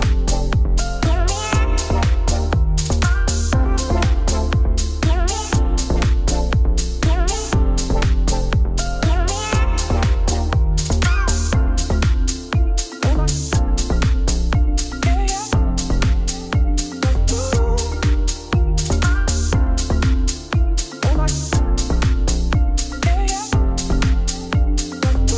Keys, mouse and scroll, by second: 0.0 click, 0.2 shift+s, 0.9 middle click, 1.4 Tab, 1.7 Tab, 2.1 shift+a, 2.8 Tab, 2.9 s, 3.4-4.6 middle drag, 5.0 KP_1, 5.2 Tab, 5.4 shift+click, 5.6 z, 5.8 click, 6.2 middle click, 6.5 shift+click, 6.9 KP_1, 7.1 Tab, 7.3 z, 8.3 click, 8.6 g, 11.2 g, 13.3 middle click, 13.9-14.3 scroll down 1, 14.3 3, 14.4 click, 14.6 Tab, 14.7 click, 14.9 click, 15.2 z, 15.5 Tab, 15.7 a, 16.1 middle click, 16.4 s, 18.6 s, 19.7 middle click, 20.2 Tab, 20.5 Tab, 20.6 2, 20.6 click, 21.0 shift+d, 21.3 p, 21.6 Tab, 22.1 click, 22.7-23.9 drag, 24.0 click, 24.1 click, 24.5 Tab, 24.7 1.